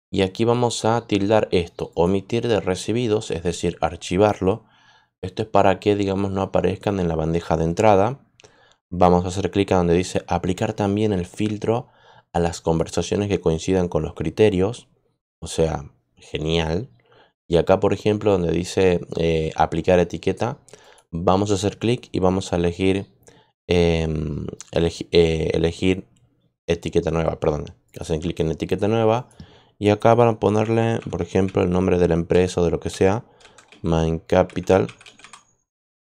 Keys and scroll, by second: 30.8-35.6 typing.